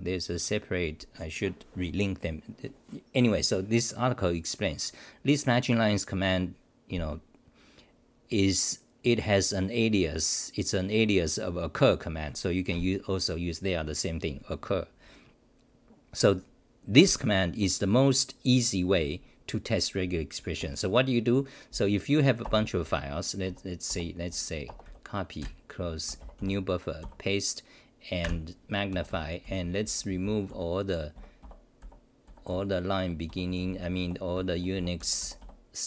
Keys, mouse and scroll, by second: 22.5 space, 23.4 Home, 23.9 Return, 27.0 k.